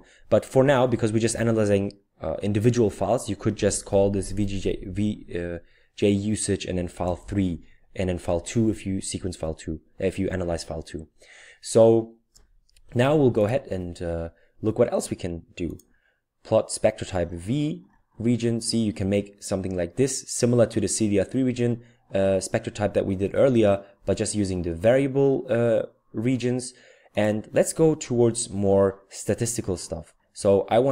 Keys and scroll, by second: 0.6 Left, 1.1 Left, 1.1 Left, 1.3 Left, 2.6 Left, 3.3 Right, 3.5 Right, 3.7 Right, 3.9 Right, 4.1 Right, 4.3 Right, 4.6 Right, 4.7 typing, 6.7-7.5 typing, 8.9-10.4 typing.